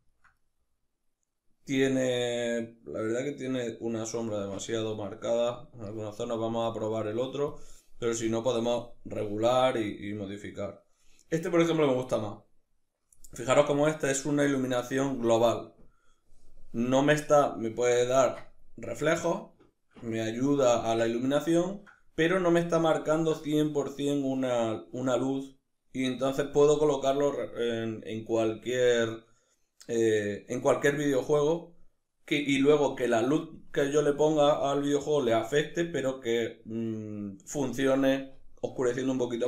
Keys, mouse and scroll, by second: 6.1-9.7 drag, 9.7-39.4 middle drag.